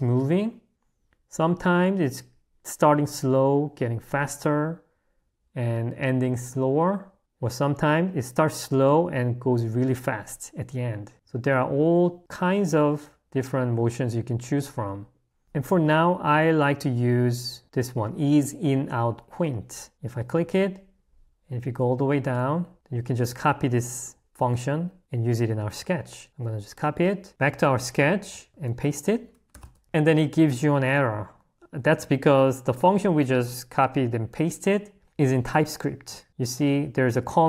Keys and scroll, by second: 27.3 Escape, 28.5 i, 29.7 Escape, 29.8 l, 37.1 h.